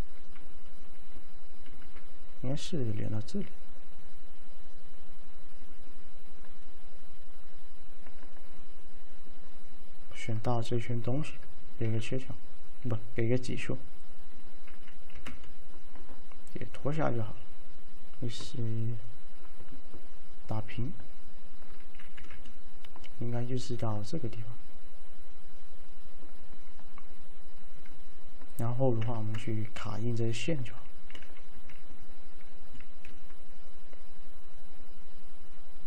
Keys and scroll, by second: 1.8 v, 11.9 alt+q, 15.2 f, 22.2 f, 29.1 F3, 31.6 2, 33.2 alt+f.